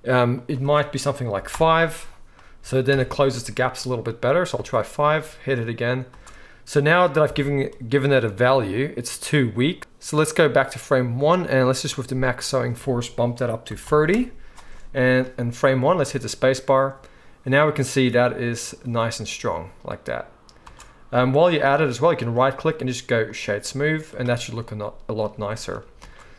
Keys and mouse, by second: 0.4-22.1 drag, 2.9 shift+Left, 4.5 space, 6.2 space, 7.2 shift+Left, 9.8 ctrl+z, 15.9 space, 20.7 space, 22.1-26.3 middle drag, 26.0 space.